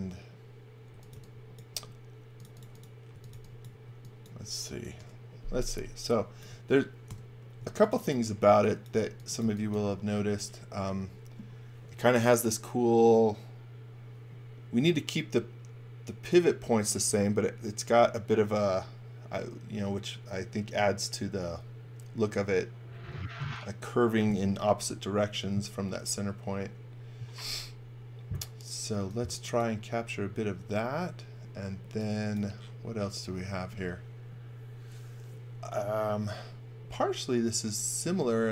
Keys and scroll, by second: 0.7-1.7 typing, 2.9-3.8 typing, 5.0 Delete, 7.1 Delete, 7.6 space, 8.5 x, 9.1 x, 9.4 v, 28.9 x.